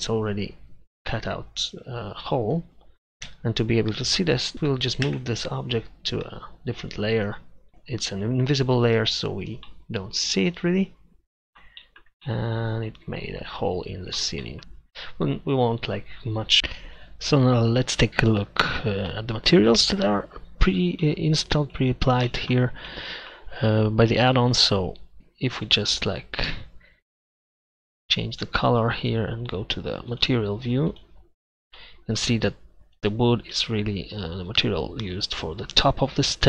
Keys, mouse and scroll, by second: 3.3 z, 5.1 m, 13.8-14.2 middle drag.